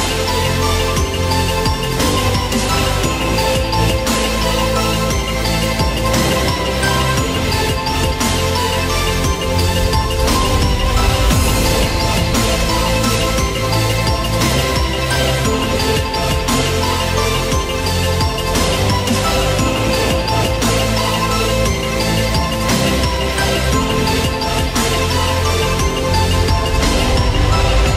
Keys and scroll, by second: 1.1 ctrl+g, 2.3 ctrl+alt+shift+e, 18.3 ctrl+g, 19.4 ctrl+alt+shift+e.